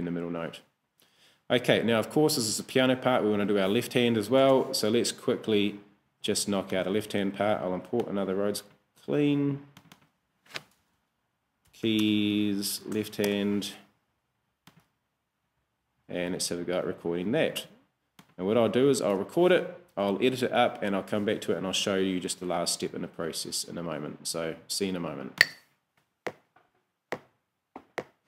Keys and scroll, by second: 4.8 super+Tab, 11.7 y, 12.0 space, 12.7 shift+l, 13.0 shift+h, 13.3 shift+Return.